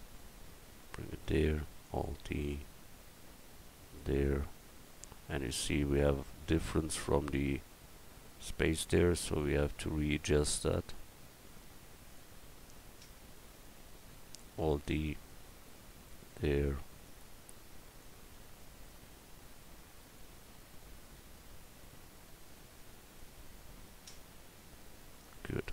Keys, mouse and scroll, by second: 1.6 alt+d, 14.4 alt+d, 25.2 middle click.